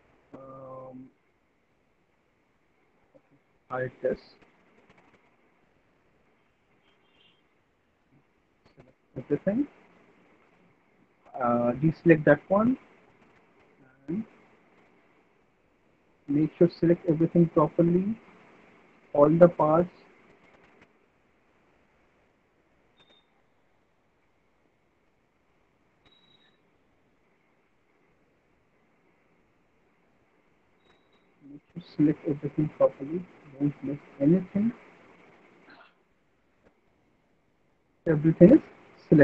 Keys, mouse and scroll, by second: 3.6 middle click, 5.8 alt+middle click, 8.5 click, 9.3 middle click, 9.6 middle click, 10.1 ctrl+click, 10.8 alt+click, 13.3 alt+middle click, 13.5 alt+middle click, 13.9 middle click, 14.2 middle click, 14.3 alt+middle click, 15.5 ctrl+right click, 16.5 middle click, 18.8 middle click, 19.2 alt+middle click, 20.6 ctrl+click, 24.6 alt+middle click, 24.6 alt+middle click, 25.3 middle click, 25.7 middle click, 26.9 alt+middle click, 27.3 middle click, 27.8 middle click, 28.6 alt+middle click, 30.1 click, 32.8 click, 33.2 click.